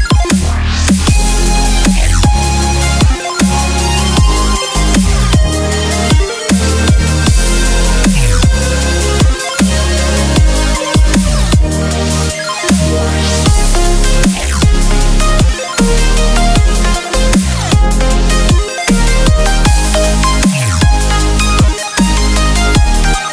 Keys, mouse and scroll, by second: 0.7 ctrl+z, 1.3 click, 2.7 click, 3.2 middle click, 4.9 middle click, 5.7-7.4 middle drag, 7.9 e, 11.2 f, 12.5 Tab, 15.6 z, 16.6 middle click, 17.2 middle drag, 17.6 middle click, 18.0 middle click, 19.6-20.1 middle drag, 21.4-22.8 drag, 22.9-23.3 drag.